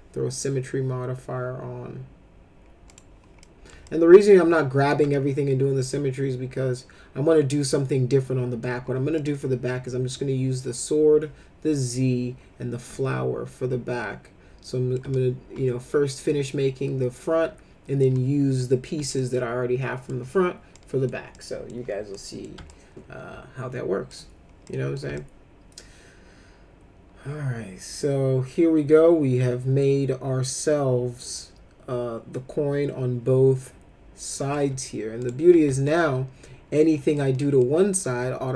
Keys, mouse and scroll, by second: 2.9 click, 3.4 middle click, 3.8 alt+middle click, 5.1-8.6 alt+middle drag, 9.1 middle click, 12.9-15.0 alt+middle drag, 15.1-18.0 middle drag, 19.2 alt+middle click, 20.7 middle click, 21.3 alt+middle click, 22.1 middle click, 22.7-24.1 alt+middle drag, 24.7 middle click, 25.1-34.5 alt+middle drag, 35.2 click, 35.9-37.1 alt+middle drag, 37.3 alt+middle click.